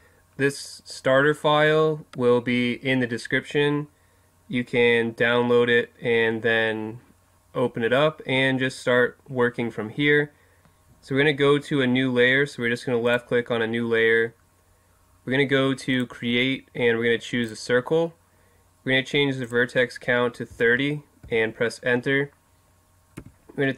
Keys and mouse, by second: 13.1-14.9 drag, 15.9-19.3 drag, 19.4-21.2 drag, 23.2 Tab.